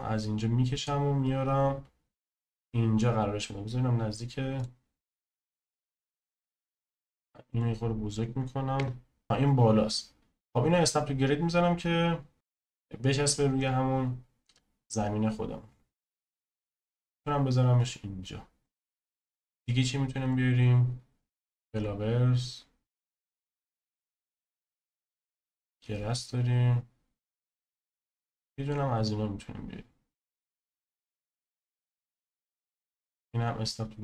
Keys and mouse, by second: 1.2 click, 5.5 ctrl+z, 6.3 s, 8.8 KP_0, 12.8 click, 14.5 click, 17.8 click, 19.3-31.0 drag, 33.6 click.